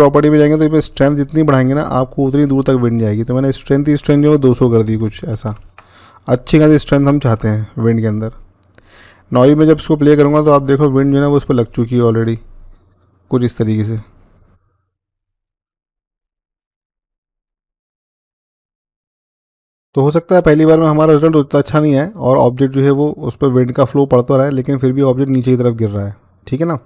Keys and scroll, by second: 4.4 typing, 5.4 Return, 18.8-19.6 typing.